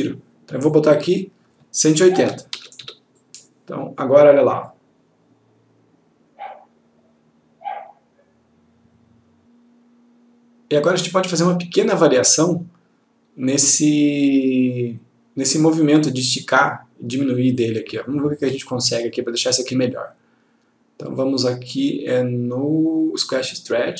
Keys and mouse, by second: 2.3 typing, 3.3 click, 17.9 click.